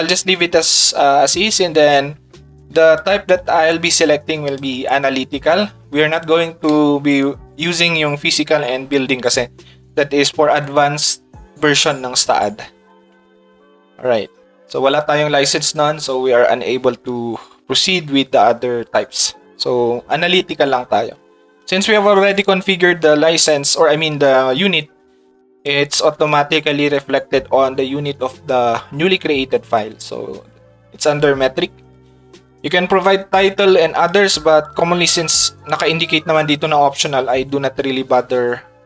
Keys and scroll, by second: 6.1 ctrl+shift+Tab.